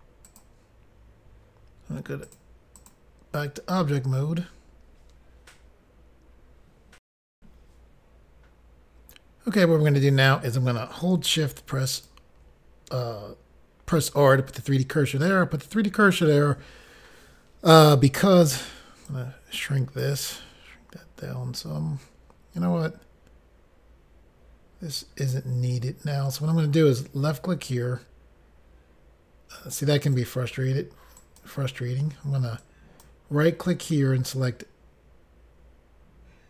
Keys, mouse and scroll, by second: 0.5 click, 0.7 click, 2.5 click, 2.6 click, 3.0 click, 3.2 click, 7.3 Pause, 11.8 shift+right click, 19.0 click, 20.3 scroll down 2, 21.0-21.5 scroll down 1, 27.7 click, 31.2 right click, 32.6 right click.